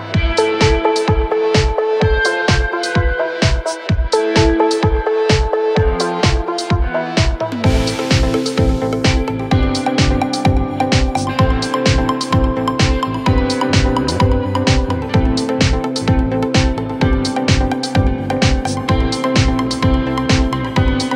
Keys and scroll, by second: 3.7 Delete, 13.2 Delete, 14.0 F3, 15.0 Escape.